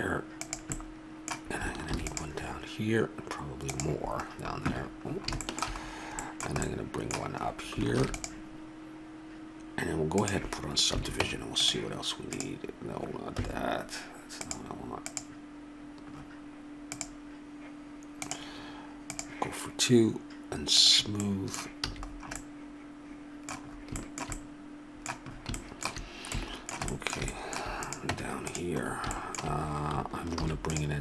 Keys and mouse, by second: 1.9 ctrl+r, 7.9 ctrl+r, 11.0 a, 11.2 Tab, 12.3-14.3 drag, 13.4 Escape, 14.4 click, 16.2-18.1 drag, 21.2 middle click, 21.4-23.1 drag, 21.9 a, 27.8 right click, 28.1 Tab, 28.9 middle click, 30.4 ctrl+r.